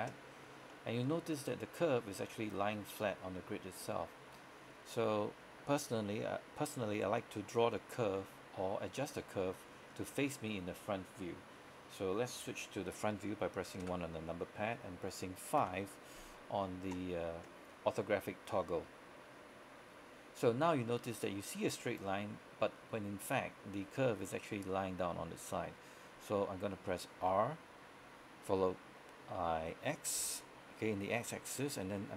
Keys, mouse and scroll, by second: 0.5 scroll down 1, 0.8-4.9 middle drag, 8.3-9.8 scroll down 1, 10.0 scroll up 1, 13.9 KP_1, 15.7 KP_5, 18.7-19.4 scroll up 1, 19.4-19.9 scroll down 1, 19.9-26.4 scroll up 1, 27.3 r, 30.3 x.